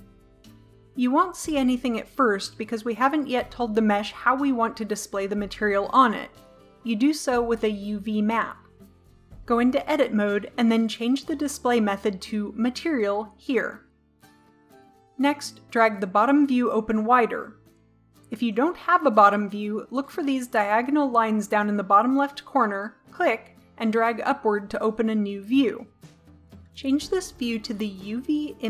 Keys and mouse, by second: 9.8 Tab, 12.1 click, 16.6-17.1 drag, 17.8 click, 23.3-25.1 drag.